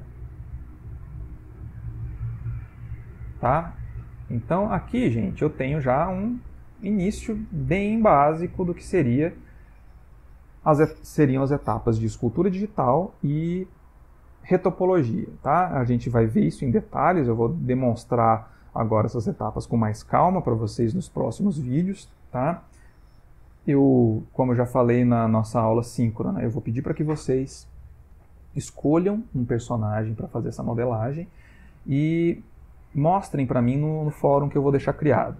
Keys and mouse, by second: 1.3 middle click, 3.5 Tab, 3.9 middle click, 4.7 ctrl+middle click, 5.1 middle click, 6.3 ctrl+middle click, 7.7 /, 8.5 ctrl+middle click, 9.2 middle click, 9.7 ctrl+middle click, 10.2 middle click, 23.7 middle click, 24.5 ctrl+middle click, 25.2 middle click.